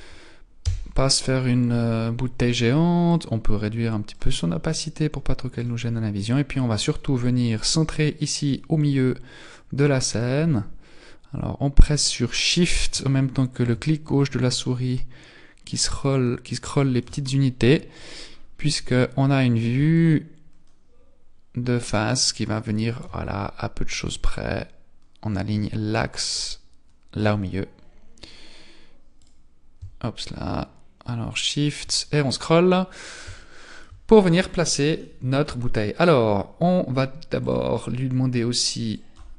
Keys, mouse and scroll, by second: 1.9 scroll up 1, 3.0 click, 4.7 click, 6.9-7.9 scroll up 2, 9.4 click, 13.6 click, 17.4-19.5 scroll up 11, 19.9 shift+click, 24.1 shift+click, 29.2 click, 30.2 shift+click, 32.2-33.6 scroll down 12, 33.4 shift+middle click, 35.0 middle click, 37.4 click.